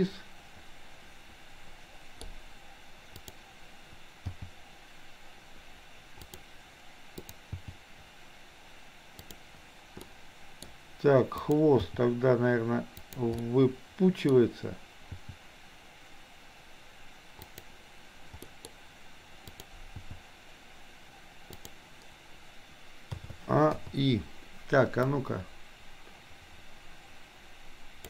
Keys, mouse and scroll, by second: 4.3 g, 7.7 g, 10.2-10.7 middle drag, 11.4 click, 11.8 g, 13.3-14.3 middle drag, 15.3 g, 18.5 scroll up 1, 19.5 click, 20.2 g, 23.2 a, 23.8 i, 25.2-28.0 drag.